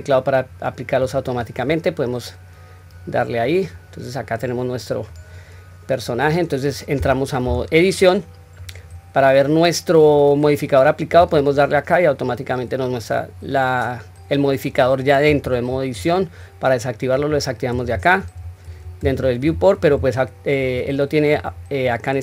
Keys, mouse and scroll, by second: 1.0 click, 1.7-5.1 middle drag, 7.4 Tab, 8.0-8.6 middle drag, 11.2 click, 11.9-14.6 middle drag, 15.7-17.1 scroll up 1, 17.1 click, 18.2 click, 18.7 click, 19.4 click, 19.8 click, 20.6 click, 21.4 click.